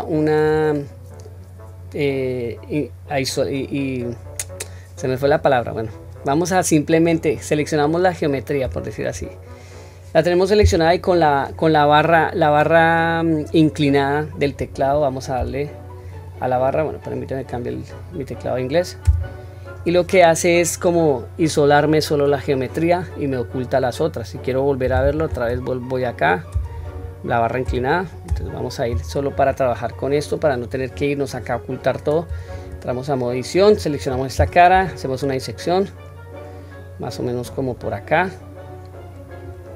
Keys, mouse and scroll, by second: 8.6 Tab, 29.9-30.3 middle drag, 30.6-31.3 scroll down 1, 32.3 Tab, 32.8-33.6 middle drag, 34.7 i.